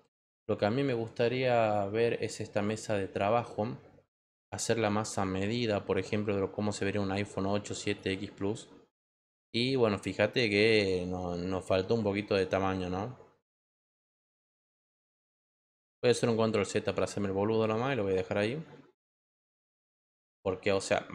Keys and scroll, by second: 16.1 ctrl+z.